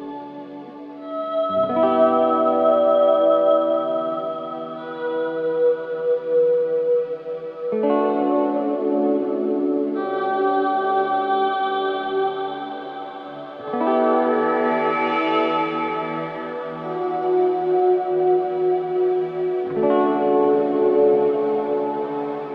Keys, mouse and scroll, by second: 0.0 click, 0.6-2.6 scroll up 1, 2.6 scroll up 1, 6.1 click, 6.5-7.3 scroll down 1, 7.3 scroll down 1, 9.9 shift+click, 10.5 right click, 10.8-11.2 scroll down 1, 11.2 scroll up 1, 11.9 right click, 13.5 click, 16.0 shift+click, 16.5 shift+right click, 17.7-20.7 drag, 22.0 scroll down 1.